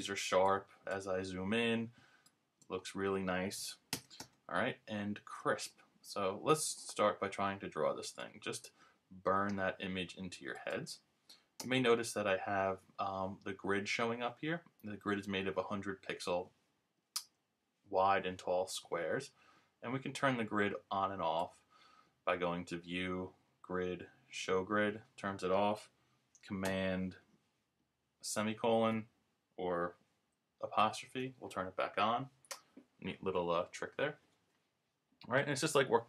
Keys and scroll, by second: 3.9 super+-, 28.9 super+;, 30.8 super+'.